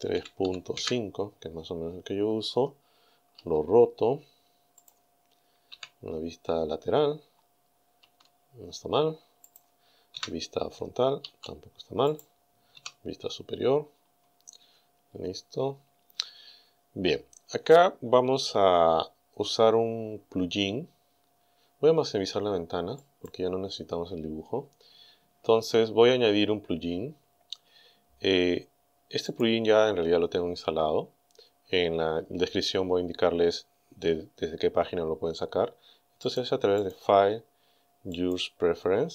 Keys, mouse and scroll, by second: 0.2 KP_Decimal, 0.4 KP_5, 0.8 KP_Enter, 3.4 r, 4.8 click, 6.9-7.6 scroll up 4, 8.0 r, 9.5 click, 10.2 KP_1, 11.3 r, 12.1 click, 12.8 KP_7, 13.9-14.3 scroll down 1, 14.5 scroll up 1, 14.8-23.0 middle drag, 23.0 click, 29.3 click, 36.3 click, 36.8 click, 38.2 click.